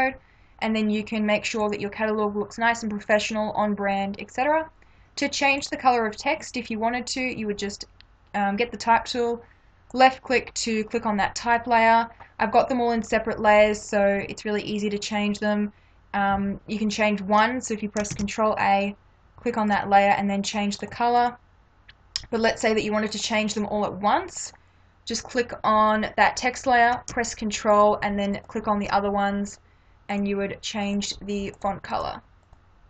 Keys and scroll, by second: 18.1 ctrl+a.